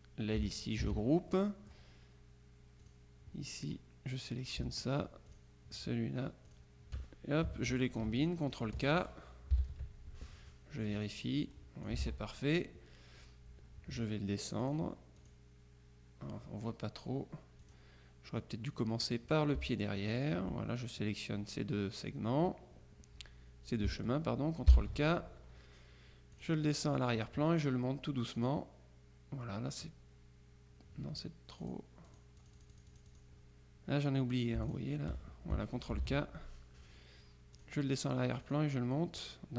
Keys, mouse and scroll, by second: 0.9 ctrl+g, 1.4 ctrl+click, 2.9 click, 5.4 shift+click, 6.6 click, 9.6 ctrl+k, 11.2-12.4 drag, 12.1 ctrl+z, 14.7 click, 17.7 click, 19.1 click, 20.2 shift+click, 24.8 ctrl+k, 26.4 click, 28.4 click, 31.7-33.7 drag, 34.7 shift+click, 36.0 ctrl+k, 37.6 click, 38.5 click.